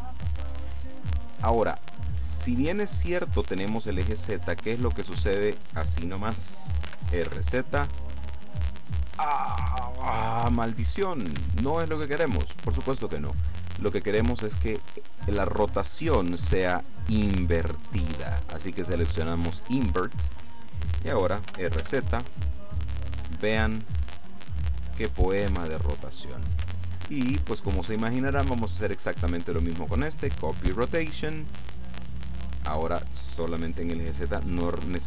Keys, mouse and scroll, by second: 5.1 right click, 6.9 r, 7.3 z, 11.3 Escape, 13.0 right click, 17.8 click, 20.5 right click, 21.6 r, 22.0 z, 25.6 Escape, 26.8 shift+click, 27.5-29.0 shift+middle drag, 28.4 shift+click, 28.4 shift+right click, 29.6 click, 31.0 click, 32.2-33.2 drag, 34.5 click.